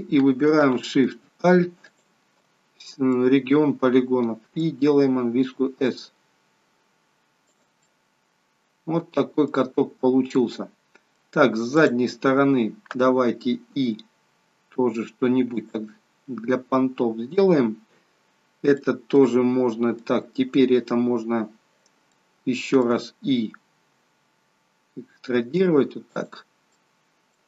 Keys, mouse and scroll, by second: 1.9 alt+shift+click, 2.7-3.0 scroll down 4, 3.1 middle click, 5.3 s, 7.8 middle click, 9.7 scroll up 2, 10.3 middle click, 11.7 click, 13.7 i, 18.7 middle click, 22.1 middle click, 23.7 i, 26.7 middle click.